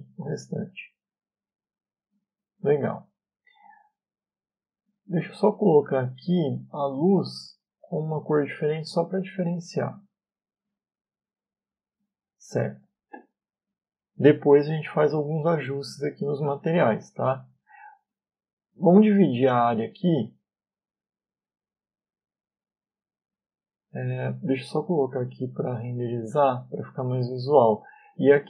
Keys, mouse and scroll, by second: 0.1 click, 2.8 Tab, 4.0 shift+middle click, 7.7 click, 8.6 click, 10.8 middle click, 19.6 right click, 25.3 middle click, 26.3 click, 28.2 click.